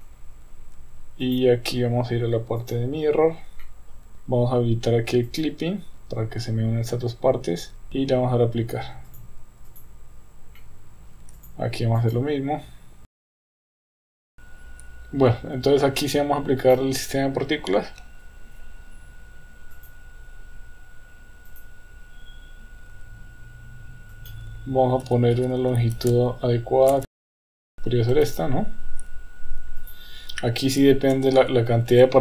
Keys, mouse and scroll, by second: 1.2-2.7 drag, 3.6-4.1 middle drag, 5.3 click, 9.2-9.8 drag, 10.6-11.1 middle drag, 11.4 click, 12.0 click, 13.1 click, 13.4 middle click, 13.5 Tab, 13.5 a, 13.6 ctrl+z, 13.7 ctrl+z, 13.7 middle click, 14.0 Tab, 14.0 a, 14.1 middle click, 14.2 Tab, 14.3 click, 14.3 KP_1, 16.7 click, 19.9 click, 21.5 click, 24.1-27.1 drag, 27.3 click, 27.6 middle click, 28.1 KP_1, 29.8-32.2 drag, 31.4 KP_0.